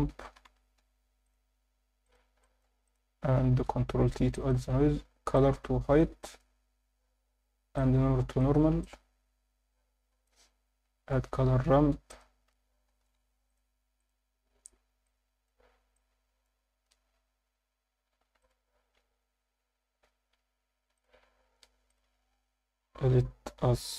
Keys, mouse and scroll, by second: 2.4 alt+shift+middle click, 2.8 click, 3.6 ctrl+t, 3.9 scroll up 1, 4.3 alt+shift+middle click, 4.7 scroll up 2, 5.3-6.0 drag, 6.2 alt+shift+middle click, 7.8-8.5 drag, 8.8-10.3 drag, 11.8 shift+a, 15.1-15.5 drag, 15.9-16.4 drag, 18.4 click, 20.9 ctrl+shift+click, 21.9-23.9 drag.